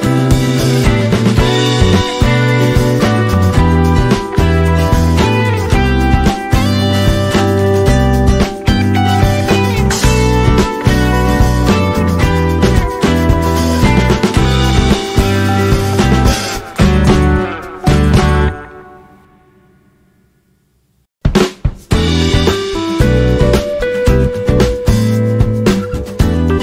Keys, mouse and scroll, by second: 0.6 click, 1.4 Delete, 2.6 ctrl+f, 4.0 click, 5.1 click, 6.2 Delete, 6.9 ctrl+f, 10.7 click, 13.1 click, 14.3 Delete, 14.8 ctrl+f, 16.4 click, 17.6 click, 18.2 Delete, 18.8 ctrl+f, 20.8 click.